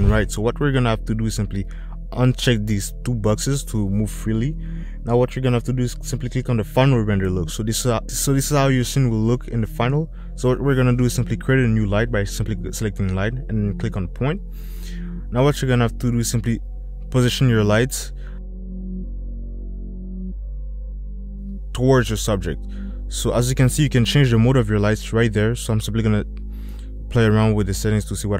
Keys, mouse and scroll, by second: 1.9 click, 2.4 click, 3.2 middle click, 4.5 middle click, 7.2 click, 11.4 shift+a, 17.3 g, 19.0 middle click, 19.9 middle drag, 21.2 click, 22.0 middle drag, 24.1 middle click, 27.2 click, 27.3 middle click.